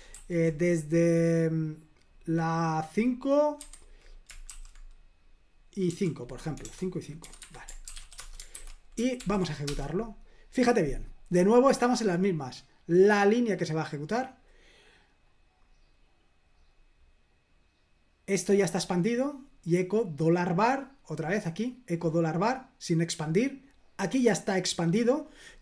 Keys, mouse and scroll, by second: 0.0-0.8 typing, 3.6-4.5 typing, 5.9 typing, 7.1-8.4 typing, 7.4 Escape, 8.6 super+h, 9.2 ctrl+p, 9.7 Return, 12.8-14.9 drag, 15.3 click, 16.3-19.1 drag, 19.4-21.3 drag, 24.4 click.